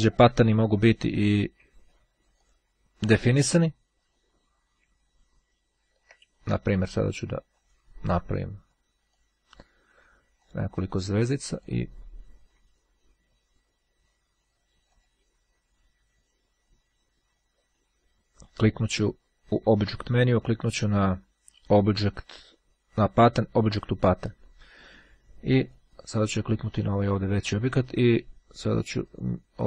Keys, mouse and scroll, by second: 2.4 click, 5.3-6.1 ctrl+scroll down 2, 7.6 click, 9.2 click, 10.5 click, 11.3 click, 14.5 click, 23.7 click, 25.7 click, 29.1 click.